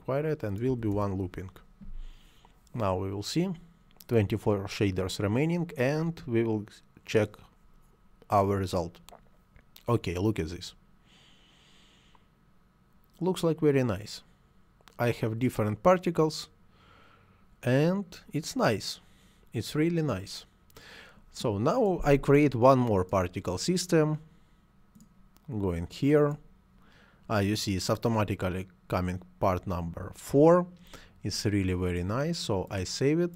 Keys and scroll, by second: 0.5 1, 0.7 Return.